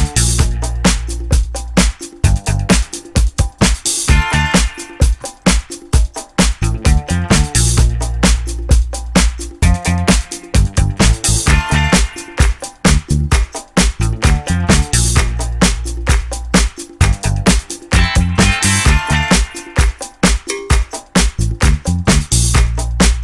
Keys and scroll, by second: 1.6 4, 1.9 ., 2.1 Return, 4.6 0, 4.7 Return, 11.0 Delete, 11.1-12.1 typing, 18.0 Escape, 22.3 Escape, 22.5 d.